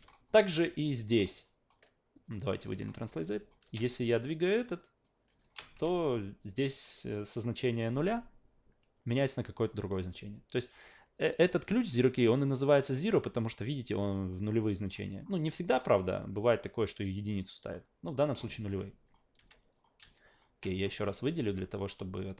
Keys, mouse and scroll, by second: 0.1 alt+middle click, 0.4-1.0 alt+right drag, 1.2 alt+middle drag, 2.2 click, 2.8 alt+middle click, 3.4 click, 3.6 w, 3.8-5.5 shift+middle drag, 5.8 ctrl+z, 15.0 alt+middle click, 15.4 alt+right click, 19.0 click, 19.4 q, 19.7 click, 20.3 shift+click, 20.8 alt+middle click, 21.4 a, 22.1 drag.